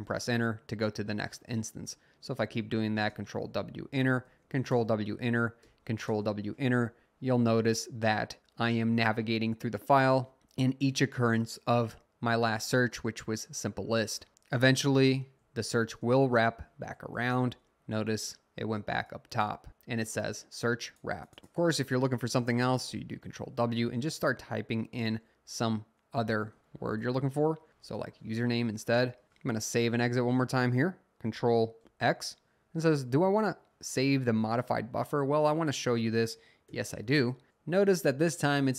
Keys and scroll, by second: 2.2 typing, 3.1 Return, 4.2 w, 4.7 Return, 5.6 w, 6.1 Return, 15.1-15.9 typing, 15.9 Return, 16.9 w, 17.4 Return, 22.9 typing, 26.2-28.4 typing, 31.8 ctrl+x, 36.7 y.